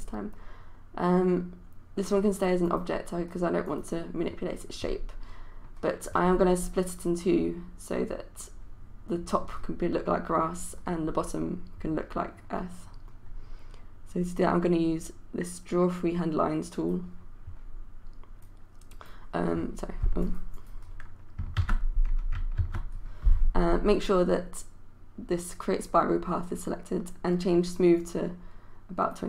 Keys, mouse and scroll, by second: 21.6 ctrl+z, 22.6 ctrl+z, 28.0-29.2 drag.